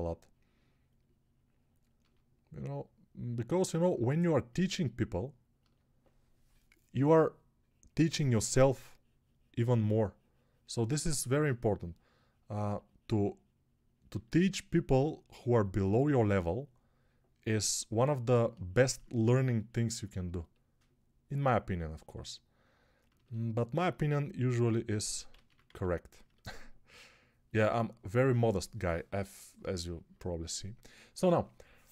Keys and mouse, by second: 25.2 ctrl+z, 25.5 a.